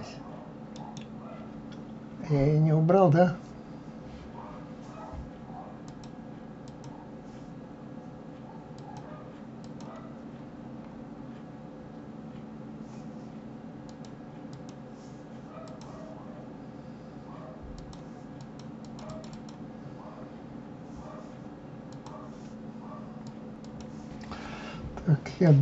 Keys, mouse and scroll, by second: 0.7 right click, 5.8-8.9 drag, 9.6 click, 10.3-11.3 scroll up 4, 12.1-12.7 scroll down 2, 13.9 click, 14.5 click, 15.6 click, 17.8 click, 18.4 click, 18.8 click, 19.1 click, 19.3 click, 19.8 scroll down 1, 20.4-20.9 scroll up 2, 25.4 click.